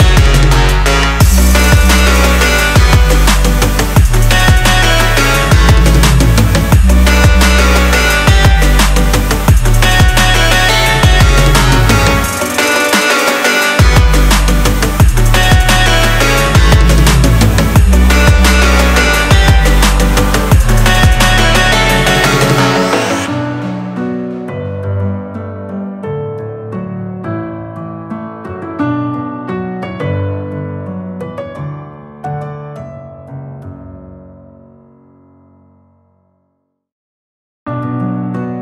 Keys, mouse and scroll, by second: 28.9 f, 35.1 x.